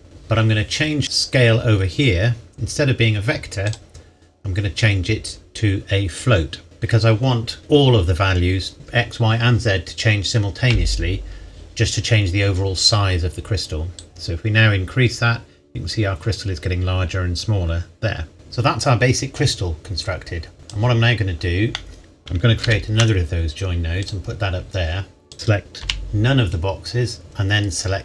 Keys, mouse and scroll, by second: 1.0 click, 3.6 click, 6.6 click, 14.0 click, 18.3-20.6 scroll up 1, 20.6 click, 21.4-21.7 scroll down 1, 21.7 middle click, 22.0 click, 22.6 shift+d, 24.0 click, 25.3 a, 25.8 b, 27.2 click.